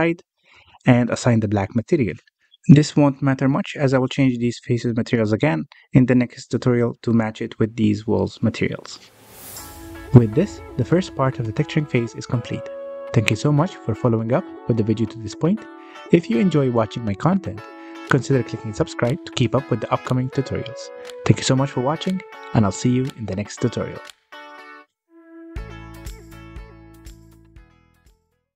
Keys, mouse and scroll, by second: 0.2 middle click, 0.8 shift+click, 1.1-2.8 middle drag, 2.8 click, 3.7 click, 4.2 Tab, 4.6 alt+a, 6.6-7.0 scroll up 1, 7.0-9.6 shift+middle drag, 9.6-10.0 scroll down 1, 10.0 middle click, 10.4 scroll down 1, 10.6-11.1 shift+middle drag, 11.1-11.7 scroll down 3, 11.7-28.5 middle drag.